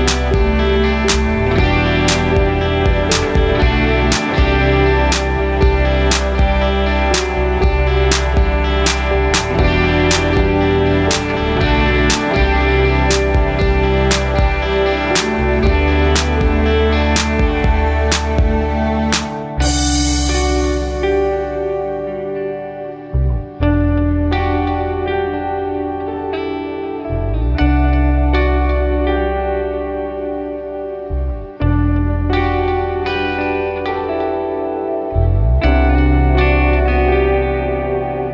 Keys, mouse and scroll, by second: 4.2 r, 6.5 click, 7.4 click, 9.3-11.9 drag, 10.2 KP_0, 14.3-18.0 drag, 19.9 click, 20.8 scroll up 1, 21.8-22.1 scroll down 1, 22.3 scroll down 1, 22.8-23.2 scroll down 1, 23.2-23.8 middle drag, 24.0 scroll up 2, 25.3 shift+a, 28.9-30.5 drag, 30.1 KP_0, 31.8-33.7 drag, 34.7 shift+a.